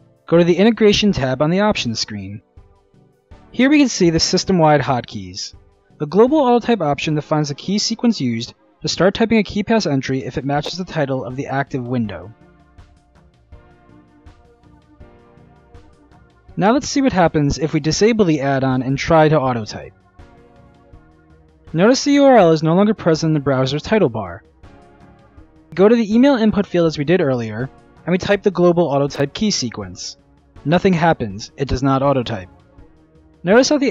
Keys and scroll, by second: 27.8 ctrl+alt+a.